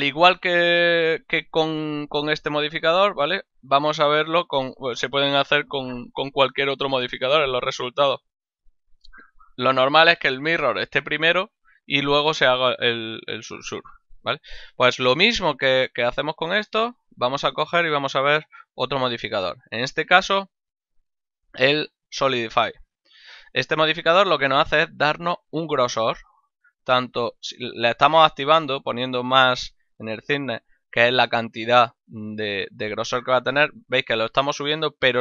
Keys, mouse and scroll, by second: 9.1 click, 17.7 click, 21.5 click, 26.0 click.